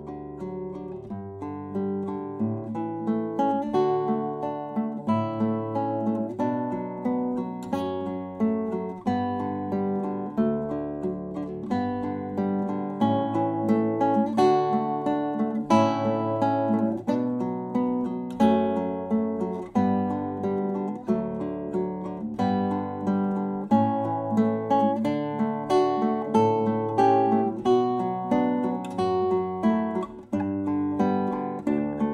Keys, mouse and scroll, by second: 4.1 s, 7.7 e, 9.3 Escape, 12.1 r, 14.8 r, 19.3 s, 24.4 s, 30.9-32.1 middle drag.